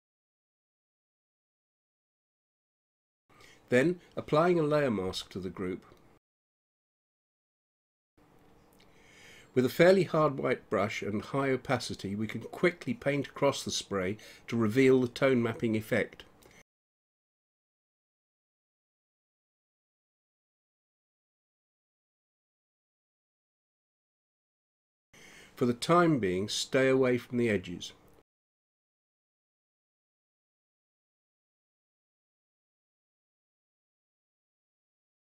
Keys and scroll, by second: 14.0 ], 25.7 space, 29.1 [, 29.5 space, 31.9 ], 33.9 space.